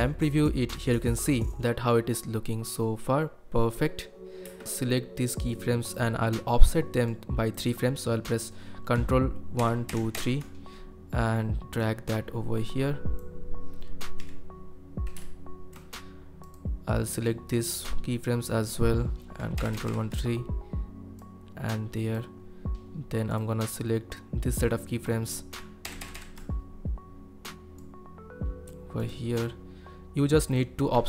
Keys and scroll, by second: 17.5 space, 19.5 ctrl+Right, 19.7 ctrl+Right, 19.8 ctrl+Right, 25.8 ctrl+Right, 26.0 ctrl+Right, 26.1 ctrl+Right.